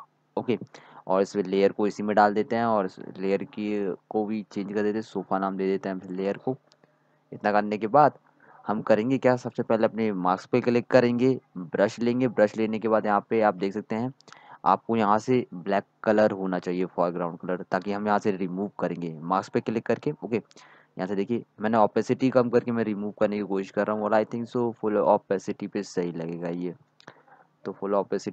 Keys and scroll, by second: 4.6-5.9 typing, 17.5-19.1 typing, 23.8-24.5 typing.